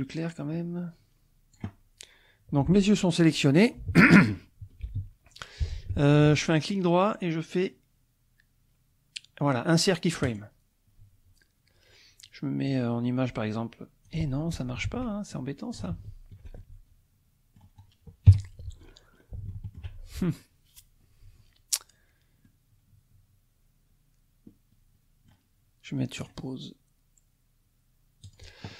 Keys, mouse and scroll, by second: 4.9 i, 6.5 right click, 10.2 click, 12.7-14.2 drag, 14.5 scroll down 2, 14.8 ctrl+z, 15.4 ctrl+click, 15.9 ctrl+z, 16.6-18.1 ctrl+drag, 18.3 KP_1, 18.8-19.5 scroll up 2, 19.5 shift+click, 22.4-25.5 drag, 26.2 click, 28.2 click.